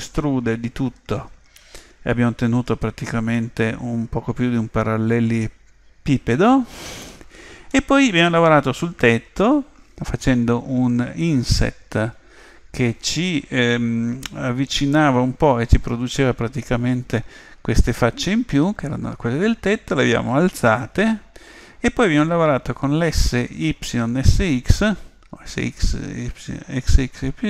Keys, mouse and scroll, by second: 3.4-5.2 middle drag, 7.8-9.5 middle drag.